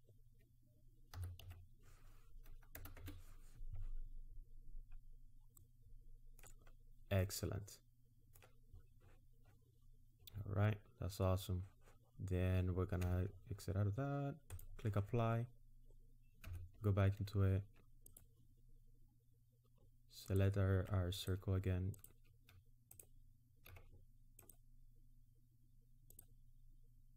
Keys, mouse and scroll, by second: 1.2 s, 5.1-5.6 scroll down 1, 5.6 middle click, 6.8 scroll down 1, 7.2 middle click, 13.0 Tab, 14.5 click, 16.5 Tab, 18.1 click, 20.3 alt+click, 21.2 click, 22.0 click, 22.9 shift+click, 24.4 ctrl+click, 26.1 ctrl+click.